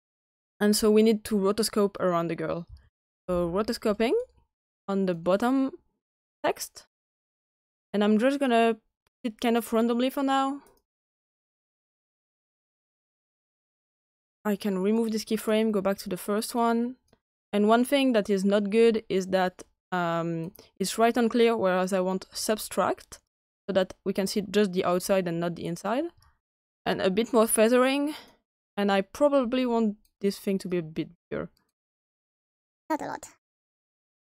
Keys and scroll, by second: 2.3-3.7 typing.